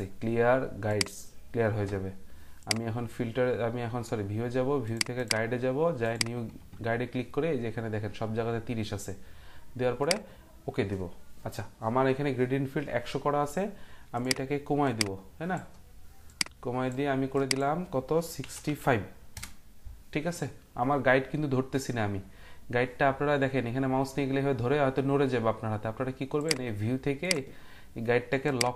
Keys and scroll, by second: 18.2-19.1 typing, 19.3 Return.